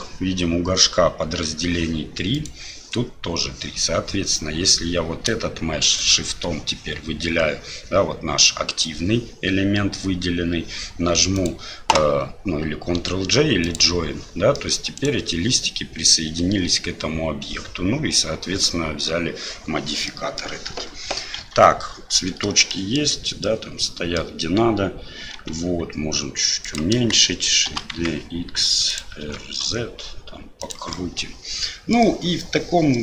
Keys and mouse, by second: 6.0 shift+click, 8.4-8.9 middle drag, 11.5-13.8 drag, 14.5 middle click, 15.0 right click, 20.1-20.4 middle drag, 22.7 shift+middle drag, 23.4-24.2 middle drag, 27.7 shift+d, 29.2 r, 30.9-32.0 middle drag, 32.1-33.0 middle drag.